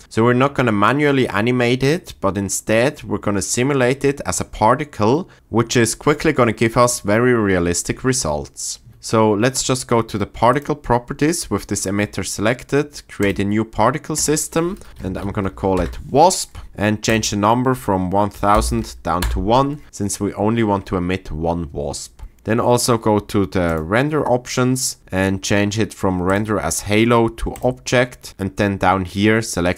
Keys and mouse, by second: 10.5 click, 13.2 click, 14.2-15.7 drag, 17.0-19.2 drag, 23.7 click, 26.4-27.6 drag, 28.3-29.7 drag.